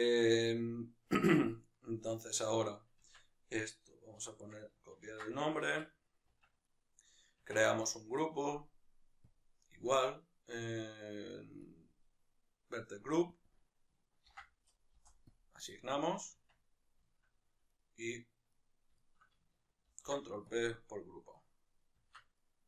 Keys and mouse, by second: 1.3 Tab, 6.7 right click, 7.5 Tab, 11.7-13.5 drag, 15.0-17.0 drag, 15.1 Return, 16.5 Tab, 17.0-17.7 shift+middle drag, 17.7 right click, 18.5-20.6 right drag, 20.6 ctrl+p, 21.4-22.2 right drag, 22.2 Tab, 22.4-22.6 right drag.